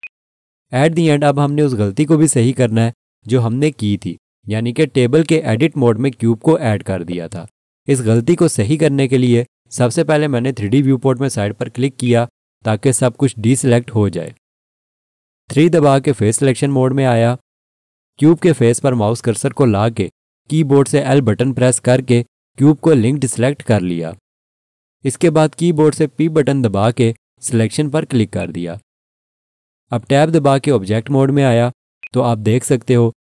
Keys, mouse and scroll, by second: 0.0 click, 5.4 scroll down 1, 7.0-9.9 scroll up 1, 12.0 click, 16.0 3, 20.8 l, 27.0 p, 28.4 click, 31.3 Tab, 32.0 click.